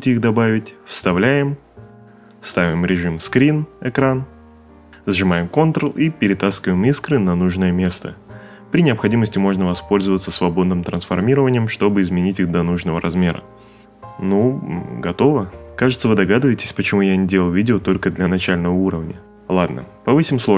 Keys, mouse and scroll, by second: 6.1 ctrl+click.